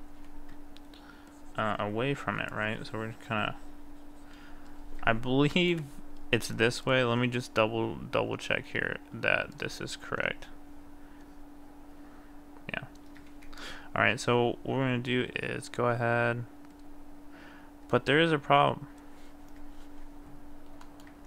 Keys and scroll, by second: 13.4 ctrl+z.